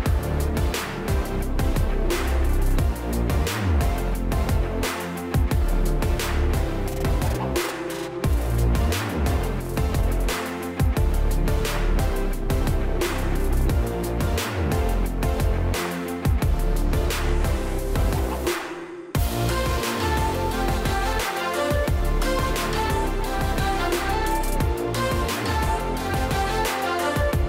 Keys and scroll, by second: 11.1 3, 11.4 Return, 16.3 space, 17.3 space, 24.3-25.4 typing.